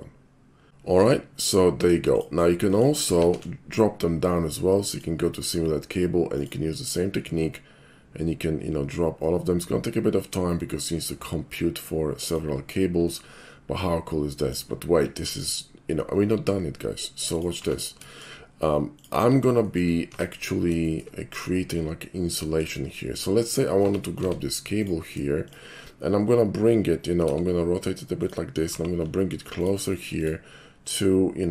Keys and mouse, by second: 0.7 ctrl+z, 2.1 click, 2.6 middle click, 3.2 alt+shift+c, 4.9 click, 6.4 click, 12.3 click, 13.1-14.5 middle drag, 14.8-16.8 middle drag, 17.3 click, 17.7 Tab, 18.1 shift+middle click, 19.0 shift+click, 19.4 shift+middle click, 19.6 shift+middle click, 20.1 Tab, 20.9 shift+middle click, 21.1-21.7 shift+middle drag, 22.4 shift+middle drag, 23.8 Tab, 24.7 click, 27.3 r, 28.1 click, 28.8 g, 29.6 shift+click, 30.1 shift+click, 30.9 shift+click.